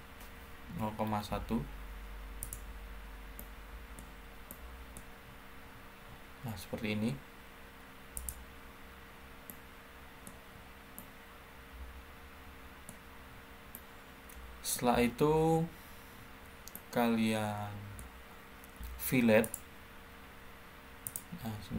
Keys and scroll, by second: 0.6-1.1 typing, 10.3-11.0 typing, 12.4-13.1 typing.